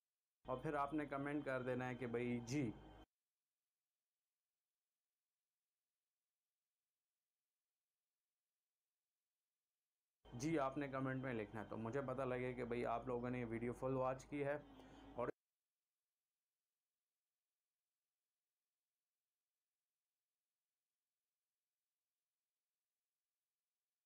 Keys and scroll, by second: 0.0 shift+Delete, 0.4 space, 3.0 space, 4.1 c, 7.3 v, 9.1 shift+Delete, 10.2 space, 15.3 space, 17.0 c, 23.0 v.